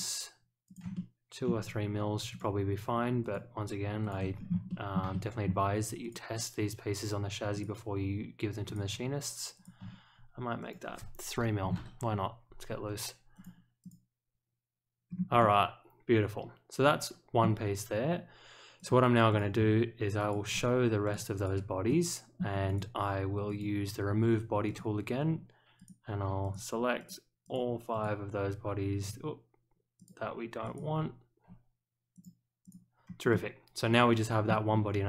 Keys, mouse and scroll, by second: 0.6 ctrl+click, 0.9-1.4 middle drag, 2.3 ctrl+click, 3.2 ctrl+click, 4.0 ctrl+click, 4.3 scroll up 1, 4.6 shift+middle drag, 5.1-5.4 middle drag, 6.0 ctrl+click, 7.5 ctrl+click, 8.6 ctrl+click, 9.5 ctrl+click, 10.6 click, 13.3 click, 13.8 click, 15.0 scroll up 1, 15.4-17.4 middle drag, 18.7 click, 19.3 click, 20.1 shift+click, 21.0 click, 21.3 click, 21.8-22.3 middle drag, 22.6 click, 23.4 click, 24.6 click, 25.7 click, 26.4 ctrl+click, 26.9 ctrl+click, 27.4 ctrl+click, 27.9 ctrl+click, 29.9 ctrl+click, 30.6 ctrl+click, 32.1 click, 32.6 click, 33.0 scroll down 1, 33.3-34.4 middle drag.